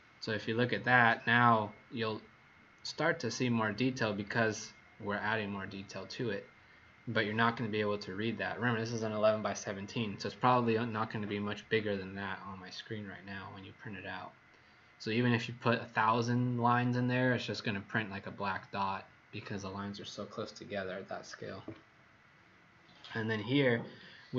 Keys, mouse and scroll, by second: 0.0-2.9 scroll up 3, 6.7-7.5 scroll down 1.